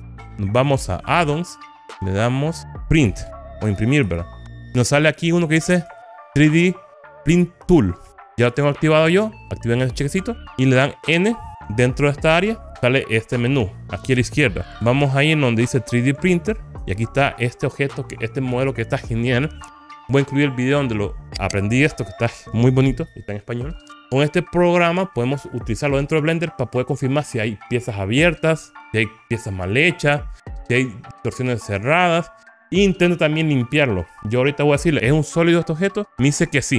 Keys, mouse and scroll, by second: 12.7 n, 14.6 click, 17.1 click, 35.8 click.